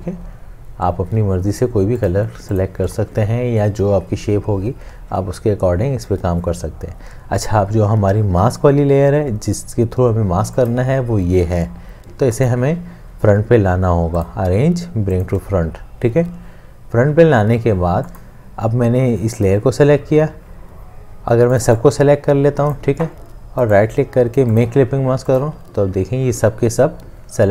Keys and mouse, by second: 12.4 right click, 23.7 right click.